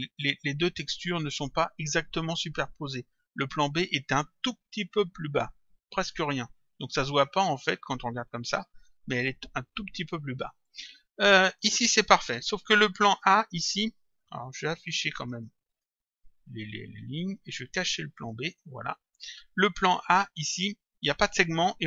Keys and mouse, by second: 3.1 click, 6.8 click, 10.6 click, 13.3 click, 14.8 click, 18.2 click, 20.4 click.